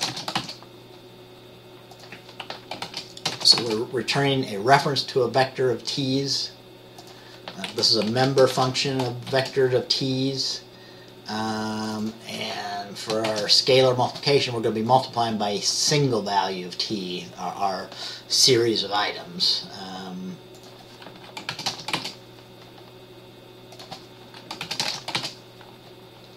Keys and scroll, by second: 0.0-0.5 typing, 3.0-5.3 typing, 8.2-8.7 typing, 10.8 typing, 13.4 typing, 21.7-22.1 typing, 24.8-25.3 typing.